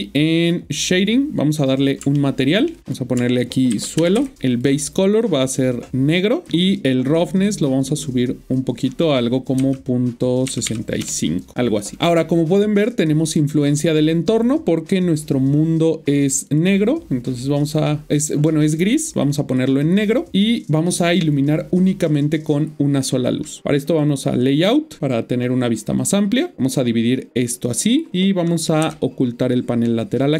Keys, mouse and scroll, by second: 0.7 click, 2.2 shift+middle click, 2.8 click, 3.7 Left, 4.1 typing, 4.3 Return, 4.5 click, 7.3 click, 9.6 typing, 11.0 Return, 12.8 click, 23.9 click, 26.5 click.